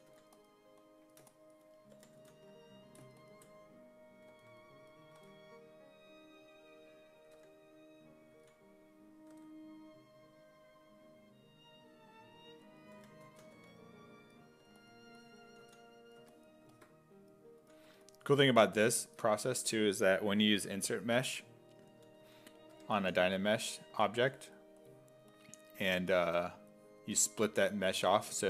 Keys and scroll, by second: 0.0-0.6 typing, 1.7-2.7 typing, 4.3 2, 5.2 w, 7.4 w, 8.3 ctrl+z, 9.3 w, 12.7-16.2 typing, 17.4-18.8 typing, 22.0-24.2 typing, 28.0 s, 28.3 1.